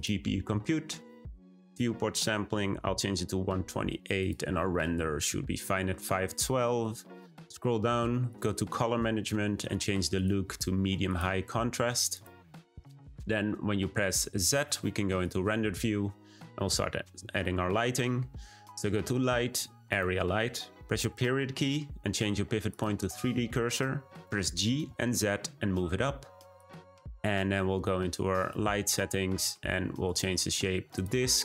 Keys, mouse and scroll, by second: 6.7-8.2 scroll down 12, 8.2-8.7 drag, 8.7-9.7 scroll down 8, 9.7-10.1 scroll down 1, 10.1-12.2 drag, 14.2 z, 17.1 shift+a, 20.9 ., 24.2 g, 28.3 click, 30.0-31.4 drag.